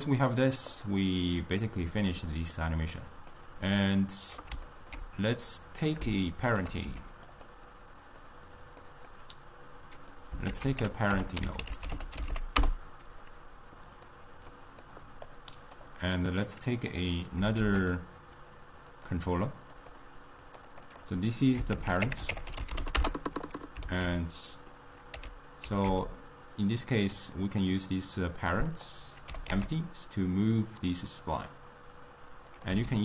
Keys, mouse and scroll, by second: 0.8 click, 1.7-2.5 middle drag, 2.5 scroll down 2, 2.8-5.4 middle drag, 5.4 click, 6.3 shift+right click, 7.0 g, 7.6-10.6 middle drag, 10.6 ctrl+a, 14.6 middle click, 15.5 click, 16.8 click, 17.6 shift+d, 19.0 click, 19.8 click, 20.8-24.1 drag, 24.1 alt+s, 25.2 r, 29.3 g, 32.9 s.